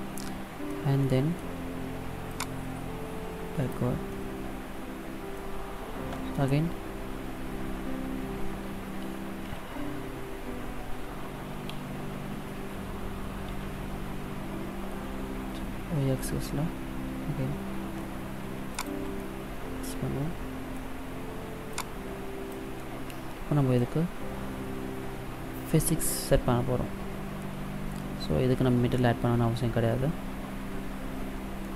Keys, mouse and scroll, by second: 0.8 middle click, 2.2 click, 4.0 middle click, 9.3 s, 19.0 middle click, 21.6 click, 22.7 middle click, 31.4 middle click.